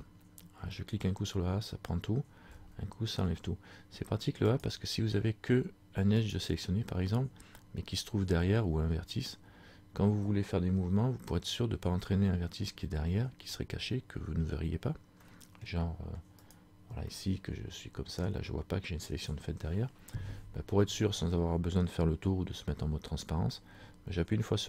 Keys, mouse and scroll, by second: 4.6 right click, 15.2 middle click, 16.5 right click, 17.1 middle click, 20.1-20.5 scroll down 2.